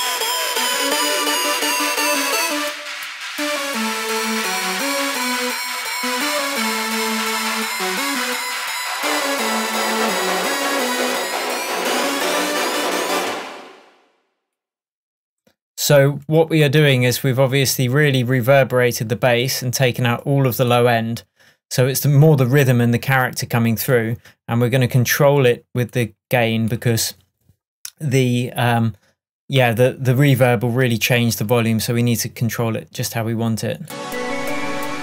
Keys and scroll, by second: 13.2 space.